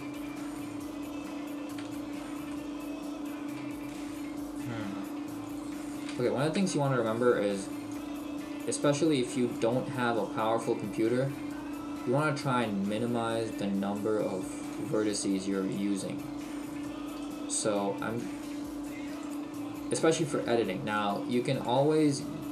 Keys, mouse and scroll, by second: 0.8 right click, 2.0 shift+middle click, 2.6 shift+middle click, 5.5 right click, 6.1 shift+right click, 6.7 shift+middle click, 8.0 click, 10.1 right click, 10.7 click, 13.4 click, 16.7 right click, 17.1 shift+right click, 18.2 click, 20.1 click.